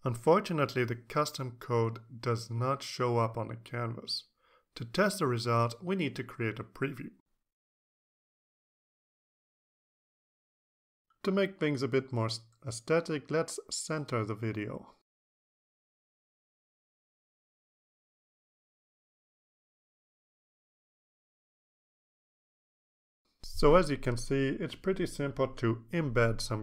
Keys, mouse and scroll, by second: 7.4 click, 12.9 click, 13.7 click, 14.7-15.8 typing, 16.2 click, 17.6-18.2 drag, 19.3 click, 19.9 click, 21.2 click, 22.2 ctrl+s, 22.5 ctrl+alt+Tab.